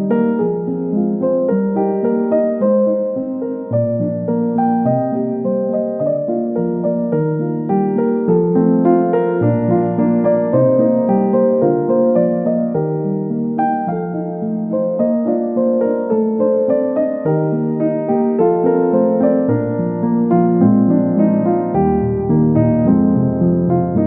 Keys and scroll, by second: 1.8 Delete, 7.0 space, 8.7 space, 9.2 space, 12.6 space.